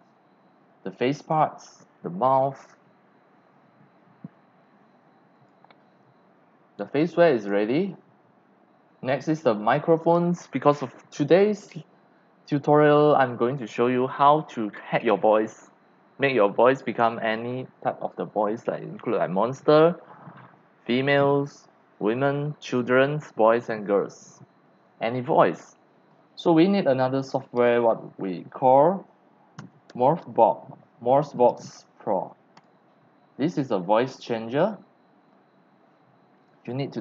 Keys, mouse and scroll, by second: 5.4 click, 5.7 click, 6.3 click, 6.6 click, 7.4 click, 8.3 click, 9.6-11.0 scroll down 1, 28.0-29.6 drag, 29.4-30.7 typing, 32.6 click, 32.7-37.0 drag.